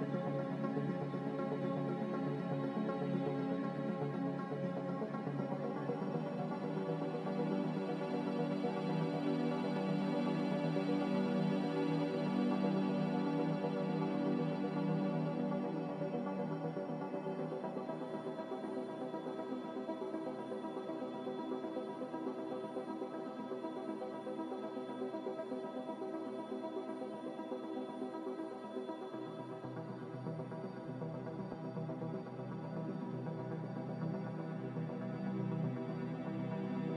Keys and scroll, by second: 4.9 g, 6.9-7.7 typing, 10.8 Escape, 12.8 z, 21.2 g, 22.6-23.4 typing, 25.9-26.7 typing, 28.7 a, 31.2 g, 32.7-33.5 typing.